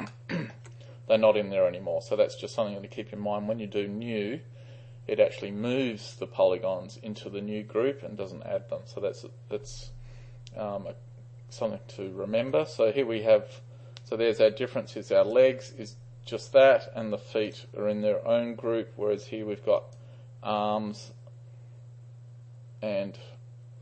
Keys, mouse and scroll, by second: 0.1-0.6 alt+middle drag, 15.3-18.5 drag, 19.9 click.